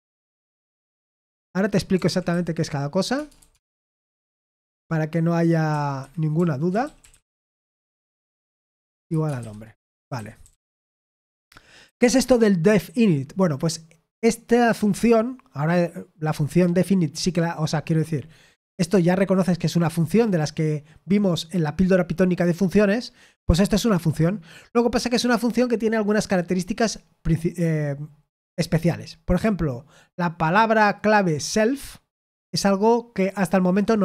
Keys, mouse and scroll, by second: 0.0-14.1 typing, 5.9 Escape.